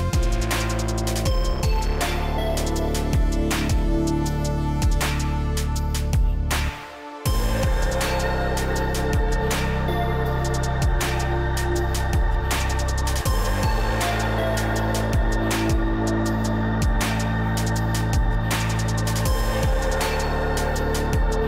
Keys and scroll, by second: 5.5 Up, 9.1 ctrl+z, 17.5 Up.